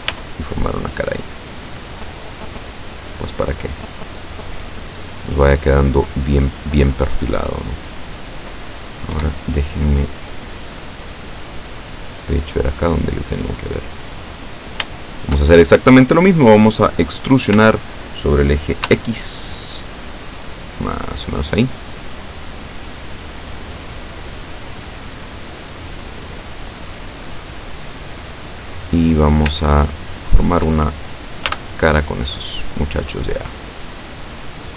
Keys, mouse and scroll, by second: 0.2 f, 0.9 scroll down 2, 1.3-6.0 middle drag, 6.2-7.4 middle drag, 7.6 middle click, 9.2 KP_7, 10.4-12.0 drag, 12.2-14.2 middle drag, 14.5 right click, 15.1 shift+right click, 17.6 e, 18.9 x, 21.1 click, 21.4-26.6 middle drag, 29.7 shift+right click, 30.2 shift+right click, 31.5 f, 32.5-34.7 drag.